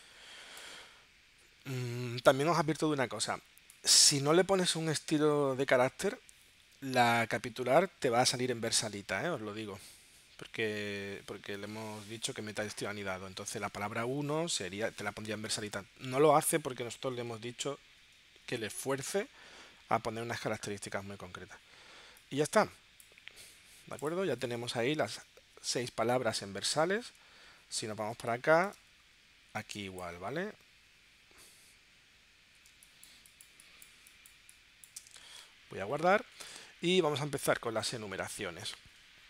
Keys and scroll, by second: 28.4 space, 29.8 space, 32.9 space.